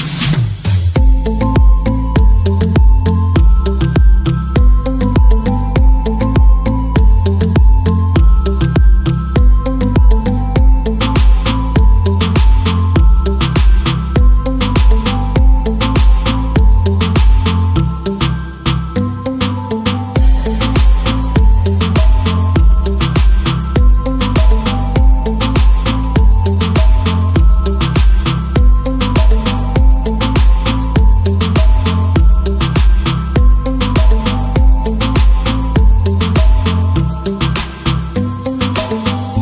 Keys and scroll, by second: 0.0-2.7 typing, 8.9 Return, 10.3 shift+,, 11.0 h, 11.5 r, 13.0 BackSpace, 13.9 shift+., 15.2 Delete, 15.3 Delete, 15.5 Delete, 15.7 Delete, 15.8 Delete, 19.7 Return, 20.3 shift+,, 20.5 /, 22.3 ctrl+s.